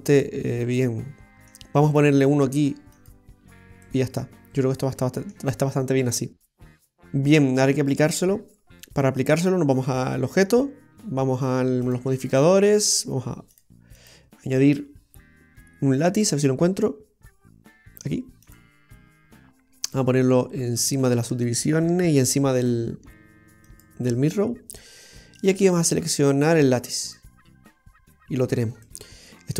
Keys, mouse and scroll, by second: 0.3 middle click, 0.3 scroll down 1, 3.0 click, 3.9 middle click, 10.1 right click, 11.9 click, 13.6 click, 14.0 click, 19.9 click, 23.7 click, 25.4 click, 28.9 middle click.